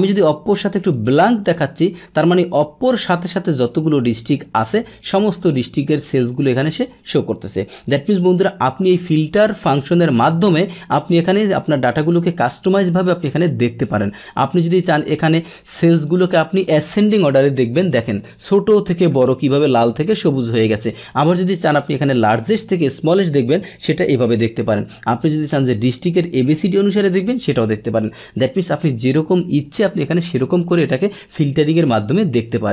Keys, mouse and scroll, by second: 0.8 click, 1.4 click, 3.6-5.5 drag, 6.6 click, 7.8 click, 8.8 click, 14.2 click, 14.9 click, 16.0 click, 16.6 click, 18.6-20.7 middle drag, 20.7-22.3 drag, 25.3 click, 25.8 click, 31.7 click.